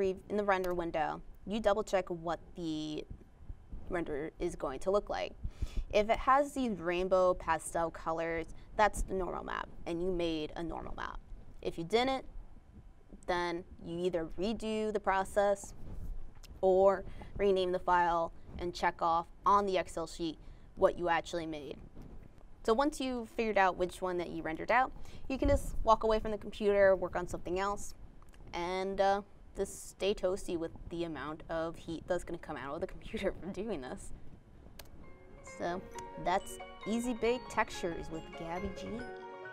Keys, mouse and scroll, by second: 10.7 alt+Tab, 12.1 alt+click, 16.7 alt+Tab, 19.5 alt+Tab, 21.3 alt+click.